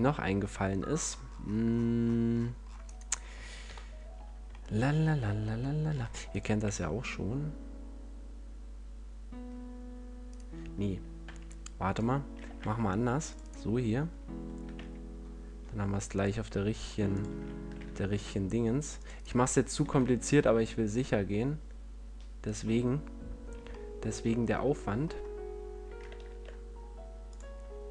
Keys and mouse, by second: 2.9 click, 3.6-4.9 middle drag, 3.6 KP_1, 5.9 ctrl+r, 10.3-12.5 right drag, 12.5 ctrl+r, 13.5-14.6 right drag, 14.6 s, 17.1-19.1 drag, 17.7 ctrl+r, 19.7-21.1 drag, 19.7 s, 22.7-24.9 drag, 25.0-26.2 middle drag, 26.2 ctrl+Tab.